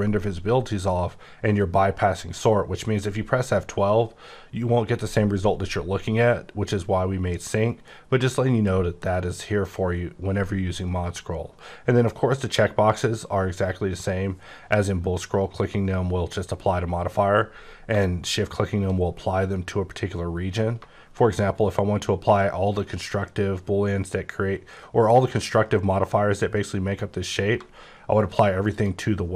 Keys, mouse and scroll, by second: 2.0-3.0 scroll up 14, 3.0-4.8 scroll down 5, 5.8-6.7 scroll down 7, 6.7-7.8 scroll up 10, 7.8-8.3 scroll down 6, 8.3-8.7 scroll up 10, 28.7 shift+click.